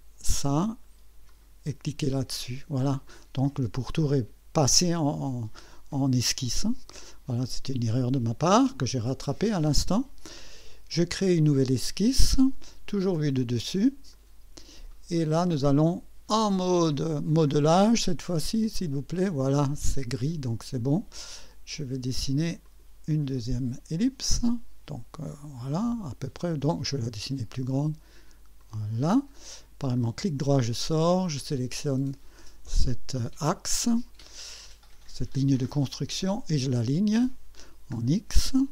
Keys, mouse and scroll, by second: 0.4 click, 1.3 click, 3.0 click, 7.9 click, 9.2 scroll down 1, 11.5 click, 13.0 click, 14.1 click, 18.8 click, 20.9 click, 22.6 click, 26.8 click, 28.6 click, 29.9 right click, 31.2 click, 35.9 click.